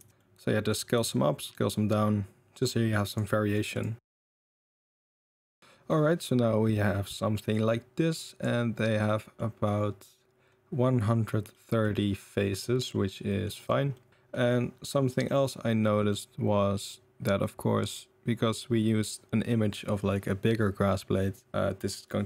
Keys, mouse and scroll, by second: 0.1 middle drag, 0.9 s, 1.7-2.6 middle drag, 3.3 middle drag, 3.7 click, 4.1-5.6 typing, 4.3 middle click, 4.6 middle click, 4.8 middle click, 5.0 middle click, 5.3 middle click, 6.2-6.7 middle drag, 8.2 middle drag, 9.0-9.3 middle drag, 11.5-11.8 middle drag, 12.2-13.1 middle drag, 13.2 middle drag, 13.5 middle click, 13.9 middle click, 15.1 middle drag, 16.1-18.5 middle drag, 21.5-21.9 middle drag.